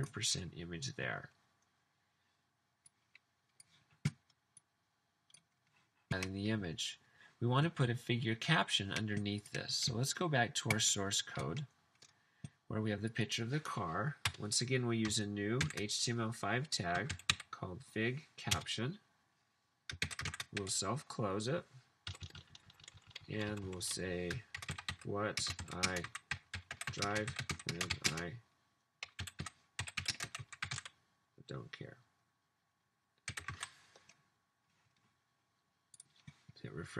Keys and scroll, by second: 14.3 Return, 15.8-18.5 typing, 20.2-20.5 typing, 22.3 Left, 22.4 Left, 23.6 Left, 23.8 Left, 24.3-32.2 typing, 33.5 super+s.